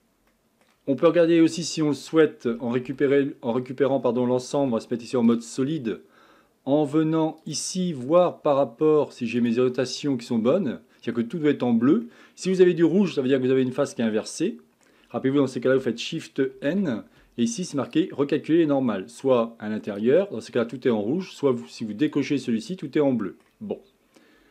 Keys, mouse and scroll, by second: 0.3-2.5 shift+middle drag, 2.5 a, 2.9 a, 4.6 z, 9.8 drag, 10.0-15.1 middle drag, 15.1-16.5 scroll down 1, 16.5 shift+n, 17.9-20.0 drag, 22.1 click, 22.7-23.7 middle drag, 23.7-24.5 scroll up 1.